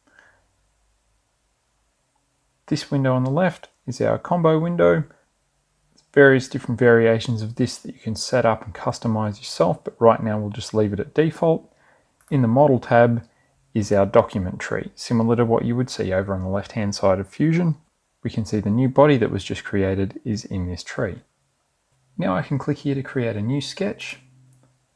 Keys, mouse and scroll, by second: 13.6 click, 24.5 click.